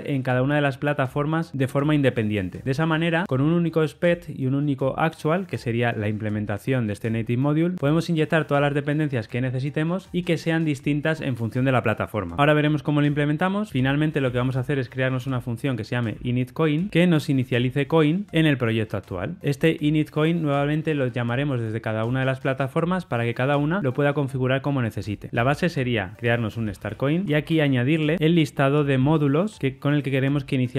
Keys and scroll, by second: 16.9 Escape.